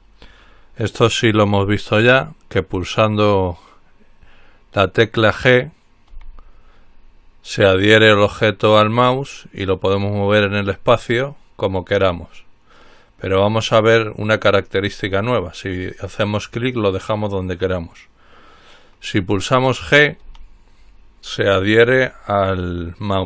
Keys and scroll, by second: 6.3 g, 20.4 g.